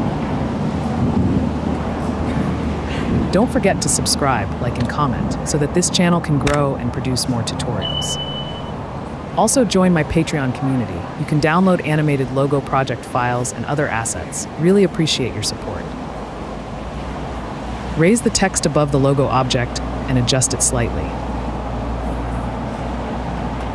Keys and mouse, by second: 1.6 g, 1.6 y, 2.0 s, 2.5 click, 3.2 Tab, 3.8 click, 4.8 Delete, 5.5 shift+Tab, 7.0 Tab, 8.2 Delete, 10.2 click, 10.7 Tab, 11.1 click, 11.6 Delete, 12.2 middle click, 13.2 a, 15.0 middle click, 16.4-17.1 middle drag, 17.4 /, 19.0 g, 19.3 z, 20.1 s, 20.3 z, 21.4 g, 21.5 z.